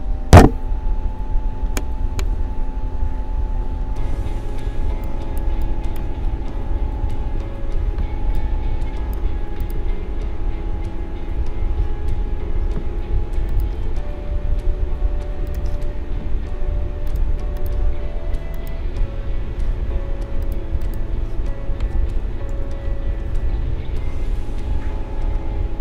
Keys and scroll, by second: 3.2 ctrl+=, 4.7 space, 7.1 ctrl+=, 8.0 space.